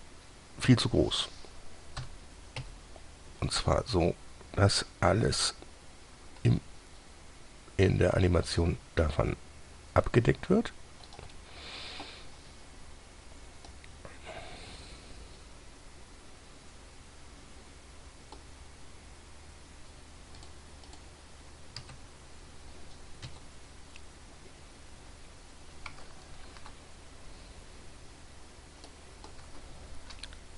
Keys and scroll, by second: 2.4-2.9 typing, 6.7 s, 9.3 s, 22.1 Tab, 23.5 Tab, 26.9 ctrl+z, 30.4 ctrl+z.